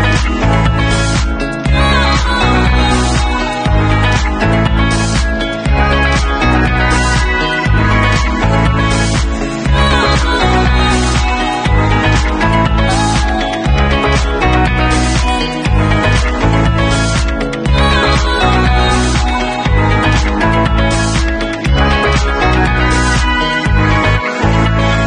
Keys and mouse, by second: 8.4 w, 10.1-11.8 middle drag, 11.8-19.4 drag, 19.4-19.7 alt+middle drag, 19.7-25.0 alt+drag, 20.3 ctrl+s.